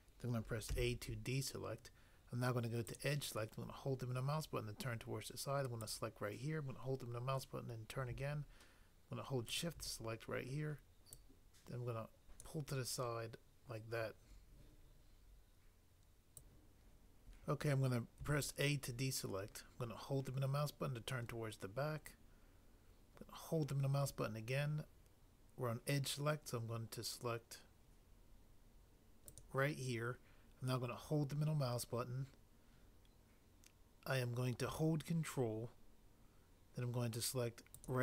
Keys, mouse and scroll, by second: 0.7 a, 5.8 click, 16.5 click, 18.1 a, 29.3 click, 29.5 click, 30.8 click.